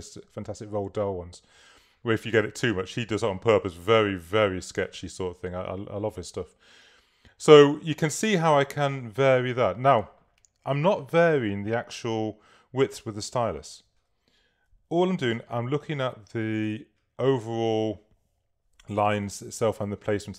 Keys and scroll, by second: 15.6 v, 19.3 k.